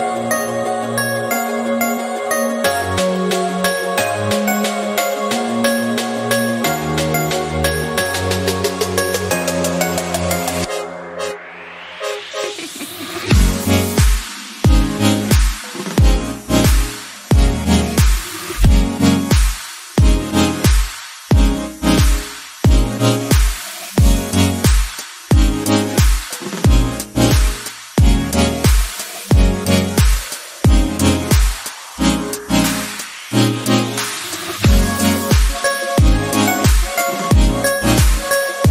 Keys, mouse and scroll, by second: 0.2 scroll down 4, 0.6 Tab, 1.5 KP_1, 2.1 click, 2.5-4.0 scroll up 2, 4.3 ctrl+r, 7.2-7.7 scroll down 10, 8.3-9.4 shift+scroll up 5, 8.5 shift+middle click, 9.4-10.4 shift+middle drag, 10.4 g, 13.4 scroll down 2, 13.7-14.9 shift+middle drag, 14.9 Tab, 15.1 scroll down 1, 15.4 middle click, 16.3 scroll up 4, 16.8 middle click, 17.5 click, 17.8-18.5 scroll down 2, 18.0 KP_1, 18.5-19.9 drag, 19.9 scroll up 3, 20.2-21.5 shift+middle drag, 27.5-30.8 right drag, 30.8-31.9 drag, 31.9 scroll up 4, 32.7 click, 33.0 KP_Decimal, 33.3 middle click, 33.6 scroll up 2, 33.8-35.9 shift+middle drag, 35.9 click, 36.5 n.